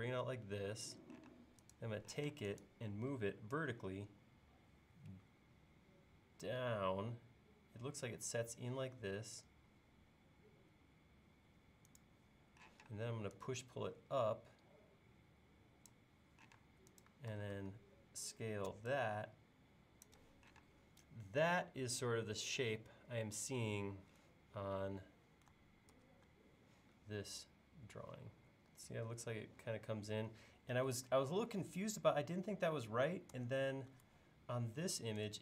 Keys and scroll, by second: 1.3 space, 3.3 Up, 12.7 p, 16.6 space, 25.9 super+Tab, 33.4 super+Tab.